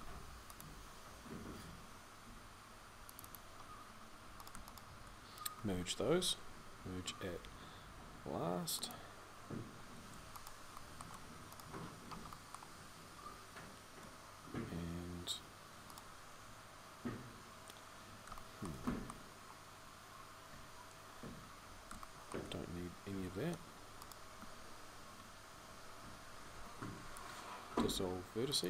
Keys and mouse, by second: 3.4-11.8 middle drag, 11.9-19.3 middle drag, 19.3-21.0 right drag, 21.0-26.3 middle drag, 26.3 x.